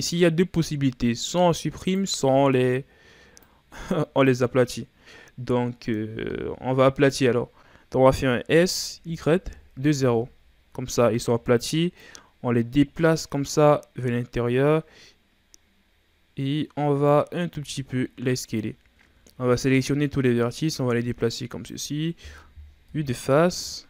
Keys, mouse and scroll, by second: 0.2-1.7 scroll up 2, 1.7 right click, 2.2 b, 8.3 s, 11.9-14.9 drag, 17.4 s, 18.9 a, 19.3 a, 20.3-22.7 drag, 22.7 KP_1, 23.3 z.